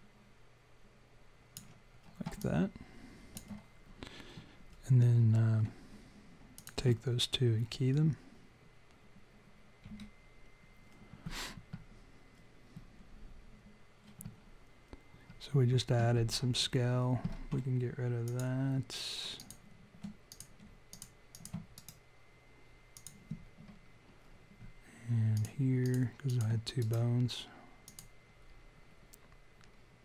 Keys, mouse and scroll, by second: 2.4 alt+click, 6.5 shift+click, 18.2 click, 19.3 click, 20.3 click, 20.8 shift+click, 21.3 shift+click, 21.7 right click, 23.7-24.1 scroll down 4, 25.3 click, 25.8 shift+click, 26.7 right click, 28.8-29.2 scroll up 3, 29.3-29.7 scroll down 3.